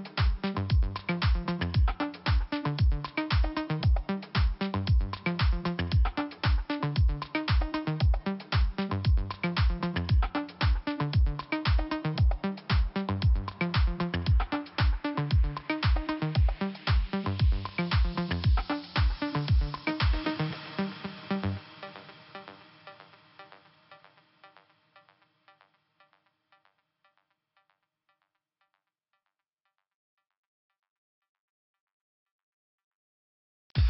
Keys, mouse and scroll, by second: 2.5 click, 3.5 click, 5.2 click, 6.1 click, 6.2 click, 6.6 click, 6.7 double click, 7.6 double click, 7.7 double click, 9.2 click, 9.3 click, 10.4 click, 10.5 click, 11.4 click, 13.0 click, 15.3 click, 15.6 click, 15.7 click, 17.9 click, 18.0 click, 19.0 click, 19.0 click, 19.8 click, 19.8 click, 20.7 click, 20.8 click, 21.7 click, 23.1 click, 25.9 click, 27.2 click, 27.3 click, 28.2 click, 28.3 click, 29.1 scroll up 2, 30.6 click, 33.0-33.3 scroll down 2.